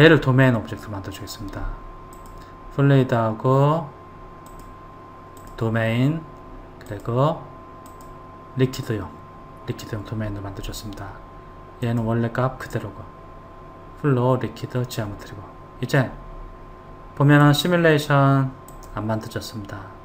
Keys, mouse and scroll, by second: 0.1 click, 2.4 click, 4.7-10.1 drag, 12.1 click, 17.7 click, 18.9 click.